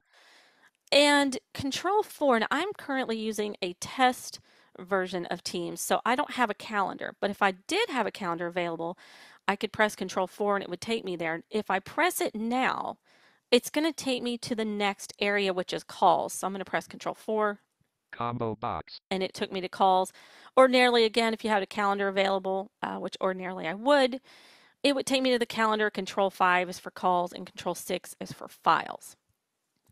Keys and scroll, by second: 16.4 ctrl+4.